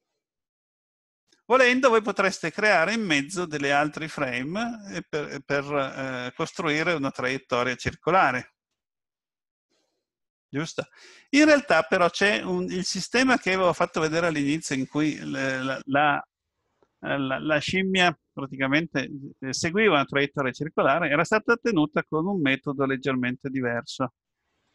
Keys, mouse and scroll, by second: 12.8 click, 14.0-14.7 scroll down 2, 14.7 middle click.